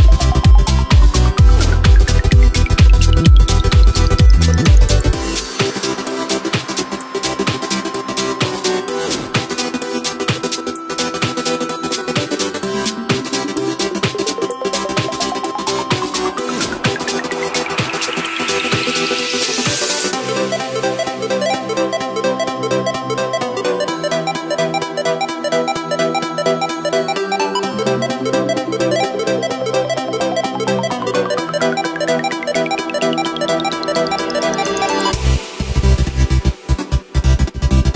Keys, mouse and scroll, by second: 6.1-9.1 middle drag, 9.7-10.8 shift+drag, 10.8 shift+right click, 11.0 shift+right click, 11.8 g, 14.0 right click, 14.3 shift+right click, 15.0 g, 16.5 e, 18.9 right click, 19.3 shift+right click, 19.8 shift+right click, 20.1 shift+right click, 21.1 ctrl+b, 23.9 Tab, 24.2 w, 27.4-28.0 drag, 28.3-28.8 scroll down 3, 29.1 click, 29.5-30.6 scroll down 6, 30.6-30.9 drag, 30.9-32.2 scroll down 1, 32.2-37.9 drag.